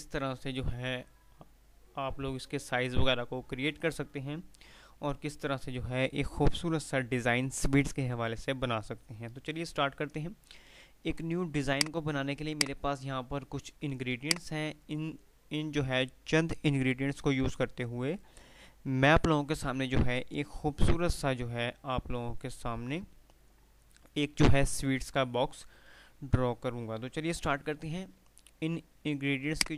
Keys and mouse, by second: 9.6 F3, 11.9 F2, 11.9 click, 27.8 F3, 28.8 F2, 29.6-29.7 click.